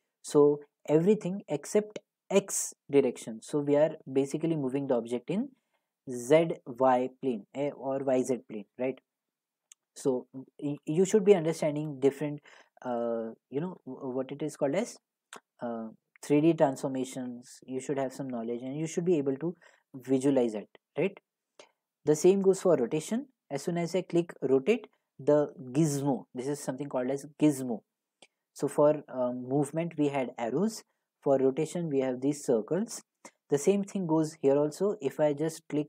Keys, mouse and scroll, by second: 10.3 click, 11.3-11.6 scroll, 12.5 scroll, 13.8 middle click, 15.0 middle click, 18.3 g, 20.0 right click, 22.8 click, 24.3 click, 24.7 click, 28.6 click, 31.4 click.